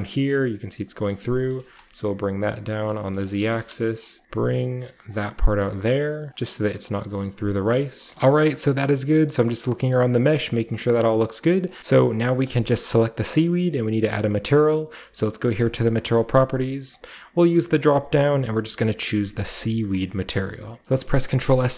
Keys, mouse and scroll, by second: 0.6-1.5 scroll up 1, 1.3-1.7 typing, 2.7-4.2 drag, 3.3-4.7 typing, 4.2 scroll up 1, 4.4-5.0 scroll down 1, 5.0 click, 5.6-6.2 scroll down 1, 6.2 click, 7.6 click, 7.8 scroll down 1, 8.1 scroll up 1, 8.1 middle click, 8.1-9.3 scroll down 1, 8.1 a, 9.3 middle click, 9.3-9.9 scroll down 1, 9.9-10.3 middle drag, 9.9-11.5 scroll up 1, 11.5 middle drag, 11.5-11.8 scroll down 1, 11.8-14.5 middle drag, 15.5 click, 16.9 click, 19.3 click, 20.0-20.4 drag, 20.0-21.0 middle drag, 20.5 scroll up 1, 20.8 ctrl+s, 20.8 z.